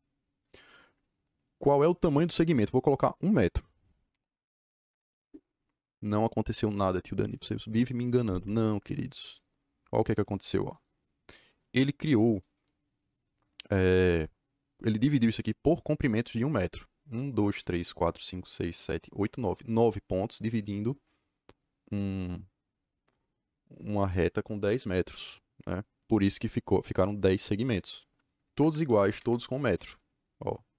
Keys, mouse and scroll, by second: 4.0 KP_1, 4.8 KP_Enter, 9.3 click, 28.4 Escape, 28.6 Escape, 28.6-29.6 typing.